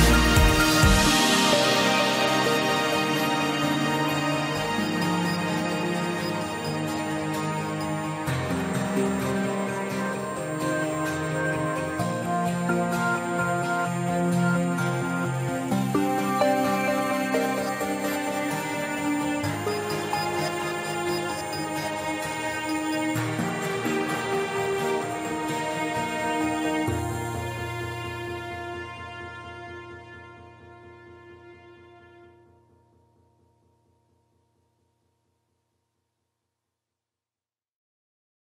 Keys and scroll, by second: 1.7 ctrl+alt+shift+e.